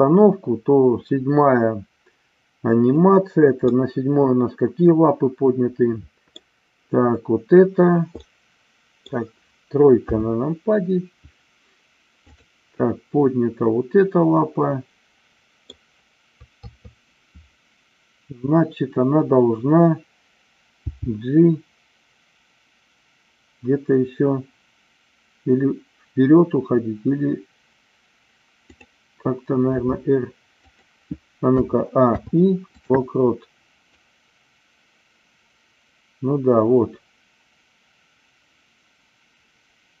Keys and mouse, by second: 3.6-6.4 middle drag, 8.2 middle click, 10.1 KP_3, 14.1-15.7 middle drag, 16.6 KP_3, 20.8 g, 28.7 click, 29.8 r, 30.5 click, 31.4 a, 32.0 i, 33.9-40.0 drag.